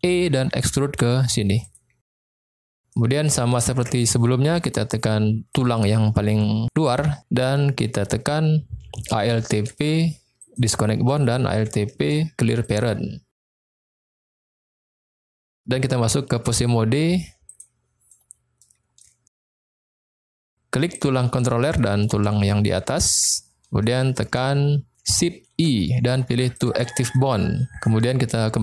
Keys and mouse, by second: 0.1 e, 1.5 click, 2.1 middle click, 2.8 middle click, 3.5 shift+middle click, 5.6 click, 6.9 middle click, 9.5 alt+p, 11.9 alt+p, 13.7 middle click, 15.3-17.6 drag, 18.1-18.6 middle drag, 19.0-19.5 shift+middle drag, 19.9 middle click, 20.9 click, 21.7 middle click, 23.0 shift+click, 23.8-24.3 shift+middle drag, 25.5 shift+i, 27.1-28.3 middle drag.